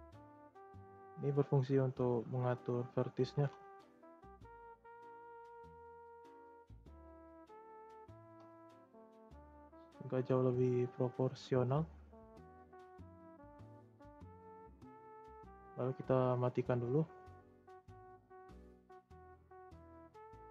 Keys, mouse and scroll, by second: 3.3 click, 3.6 ctrl+a, 7.8 click, 8.2 ctrl+a, 11.2 middle click, 12.0 scroll down 2, 12.3 shift+middle click, 12.6-13.3 scroll up 4, 13.3-14.5 middle drag, 14.5 scroll up 1, 14.6 shift+middle click, 15.1 scroll down 1, 15.2-16.9 middle drag, 16.9 click, 17.2-18.5 scroll down 1, 18.5 e.